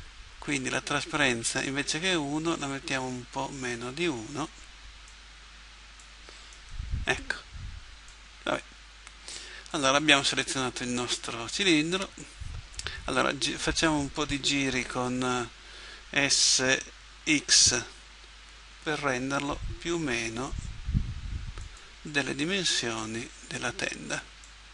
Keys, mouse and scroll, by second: 1.6-3.5 drag, 5.1-7.0 drag, 6.6-8.3 right drag, 8.1-9.7 drag, 15.0 s, 23.0-24.7 drag.